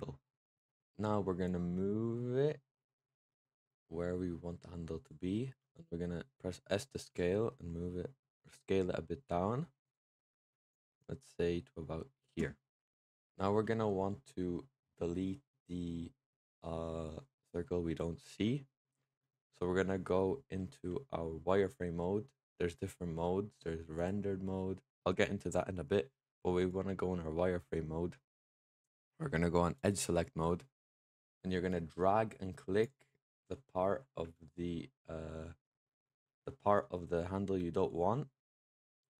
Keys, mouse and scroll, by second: 1.3 click, 5.2-7.0 middle drag, 7.0 s, 10.6 click, 12.2-12.7 right drag, 12.7 middle drag, 13.0 Tab, 13.9-19.1 middle drag, 19.1-20.0 scroll up 1, 20.0-23.1 middle drag, 24.5 click, 26.5 click, 27.2 middle click, 28.2-28.8 scroll down 1, 28.8-29.6 scroll down 1, 29.6-30.8 drag, 30.8 middle click, 31.8 click, 34.1 x, 35.5-39.1 middle drag.